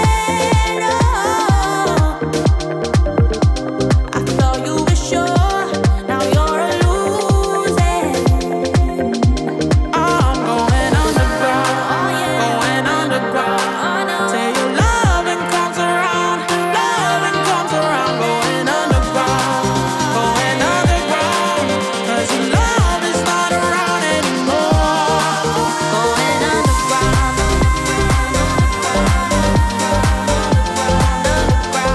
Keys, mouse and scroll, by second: 2.6 ctrl+d, 4.0 click, 7.4 Return, 7.7-9.8 typing, 12.0-27.2 ctrl+drag, 12.5-13.3 typing, 27.6 f, 28.2 click, 28.7 click, 28.8-30.0 typing, 30.9-31.9 drag.